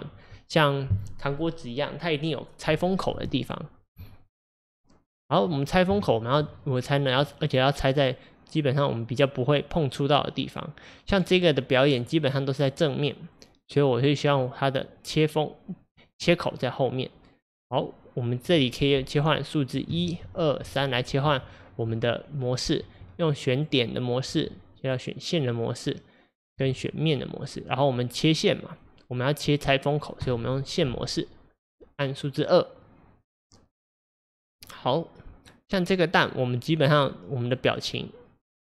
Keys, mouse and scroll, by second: 4.2-5.5 middle drag, 5.5-6.0 scroll up 4, 6.0-11.1 shift+middle drag, 11.3 scroll up 1, 11.4-11.8 scroll down 5, 12.0-20.3 middle drag, 20.3 2, 21.3 1, 23.6 click, 24.3 2, 24.9 click, 26.6 3, 27.1 click, 30.2 2, 34.0 click, 34.6-38.6 middle drag.